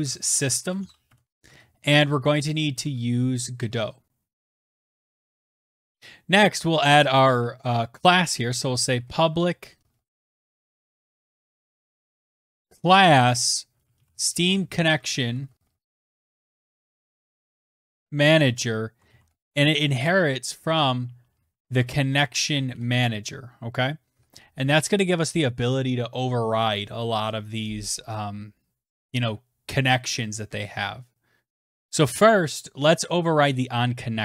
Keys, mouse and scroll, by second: 0.0 Tab, 0.2 Return, 1.2-2.3 typing, 3.5-5.9 typing, 5.1 Return, 5.5 Return, 5.9 click, 6.9-23.3 typing, 32.9-34.2 typing.